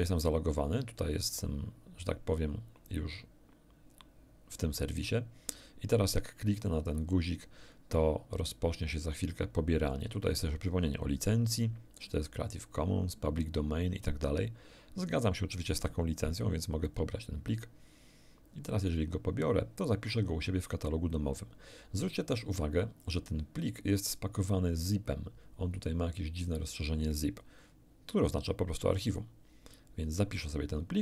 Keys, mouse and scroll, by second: 6.6 click, 16.8 click, 23.0 click, 29.1 click.